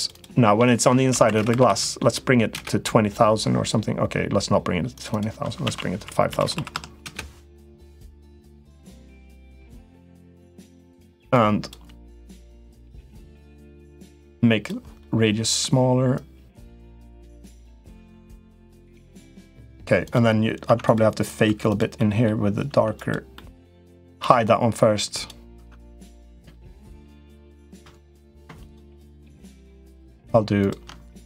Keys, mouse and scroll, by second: 1.2 0, 1.4 0, 4.8-7.5 drag, 6.3 0, 8.0 middle click, 8.9 click, 9.9 middle click, 11.1 click, 12.9-14.6 drag, 14.9 middle click, 16.0-17.3 drag, 17.5 click, 18.3 click, 19.1 middle click, 20.4 Tab, 20.6 click, 21.2 3, 21.4 click, 21.8 middle click, 22.5 Tab, 22.7 click, 23.1 middle click, 24.1 h, 24.9 click, 25.3 Tab, 25.5 click, 27.0 shift+click, 27.3 shift+click, 27.7 middle click, 28.4 shift+click, 29.0 shift+click, 29.5 shift+click, 29.9 shift+click, 30.4 shift+click.